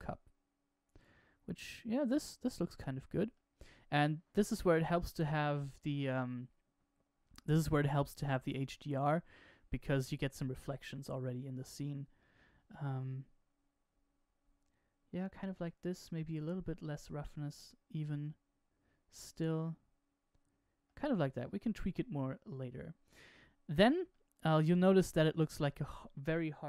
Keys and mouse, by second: 1.6-5.6 middle drag, 9.4-12.1 middle drag, 16.2-17.6 drag, 19.0-20.8 middle drag, 24.1-26.6 middle drag.